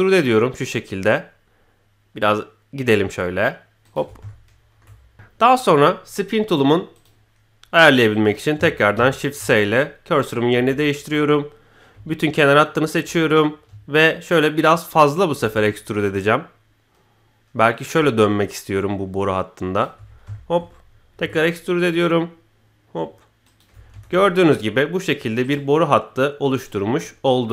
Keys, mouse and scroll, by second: 4.2-4.8 shift+middle drag, 5.1 s, 5.4-5.8 middle drag, 6.9 click, 8.1 click, 8.9 shift+s, 10.5 KP_1, 12.4 alt+click, 14.0-19.8 ctrl+drag, 20.0 scroll down 1, 20.3 shift+middle click, 21.1 e, 23.8 scroll down 1, 23.9 Tab, 24.1-25.0 middle drag, 25.4-26.8 right drag, 27.0-27.5 middle drag.